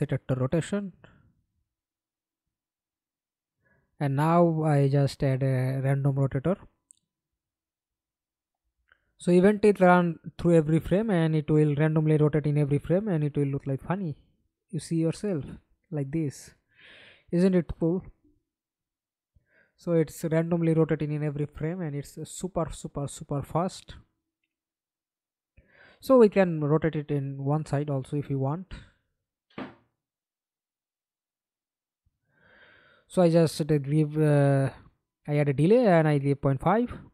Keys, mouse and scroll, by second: 1.1 alt+click, 2.6-4.2 typing, 4.7 Up, 5.0 Up, 6.5 Return, 7.0-8.6 scroll up 1, 12.8 middle click, 13.5 F11, 14.1 alt+p, 15.8-16.8 a, 17.2 w, 22.1-22.8 d, 23.2 a, 24.0 Escape, 24.2 middle click, 25.1 F11, 28.8 d, 32.5 ctrl+a, 33.3-34.9 typing, 35.3 Return.